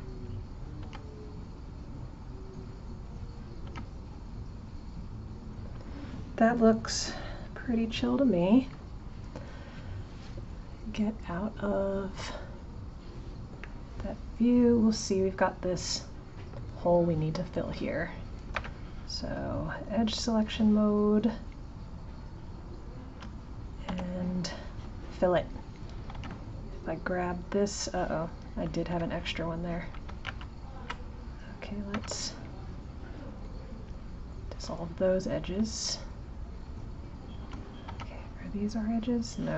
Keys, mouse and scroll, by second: 0.2 click, 3.0 click, 7.4 click, 12.0 click, 12.9 click, 13.6-16.6 middle drag, 20.0 click, 20.9 shift+click, 21.7 shift+click, 22.8 shift+click, 23.8 f, 30.2 ctrl+z, 35.2 click, 35.9 shift+click, 36.6 shift+click, 37.3 shift+click, 37.8 g.